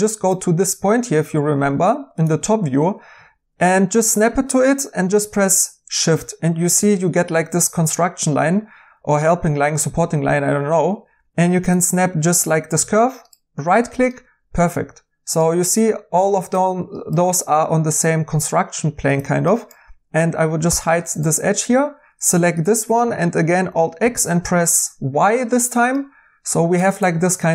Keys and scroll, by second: 20.6 h, 23.7-24.9 typing.